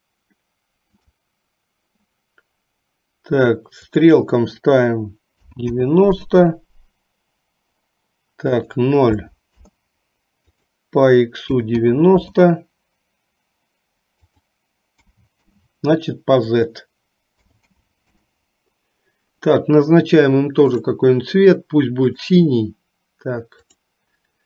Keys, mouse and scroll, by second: 1.0 click, 4.1-6.4 drag, 8.5-9.9 drag, 10.4-12.4 drag, 14.4-15.7 drag, 16.5-18.5 drag, 20.9 click, 22.2 click, 23.7-24.4 drag.